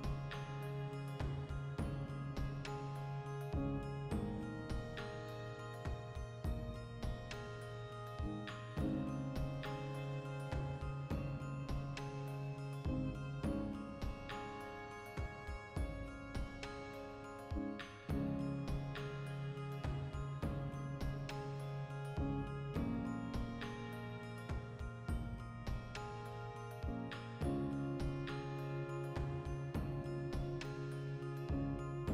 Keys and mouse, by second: 0.3 l, 0.7 g, 2.5 click, 2.8 right click, 3.0 l, 3.2 ctrl+middle click, 3.5 r, 4.0 click, 4.1 g, 4.5 click, 4.7-7.3 ctrl+middle drag, 5.6 a, 6.0 Tab, 6.4 alt+q, 7.1 g, 7.3 click, 7.4 r, 7.9 click, 8.4 click, 8.9 alt+q, 9.1-10.8 ctrl+shift+middle drag, 9.5 g, 10.8 click, 11.2 \, 11.4 middle click, 11.8 right click, 12.0 x, 12.4-14.4 shift+middle drag, 14.0 a, 14.4 click, 15.5 middle click, 16.3 right click, 16.5-19.9 shift+middle drag, 17.6 alt+q, 19.3 alt+d, 19.9 click, 20.1 x, 20.4 right click, 20.9 shift+d, 23.2 shift+click, 23.5 shift+r, 24.3-27.3 middle drag, 24.7 a, 27.3 right click, 28.3-30.2 middle drag, 28.9 a, 30.2-31.2 drag, 31.2 middle click, 31.8 right click.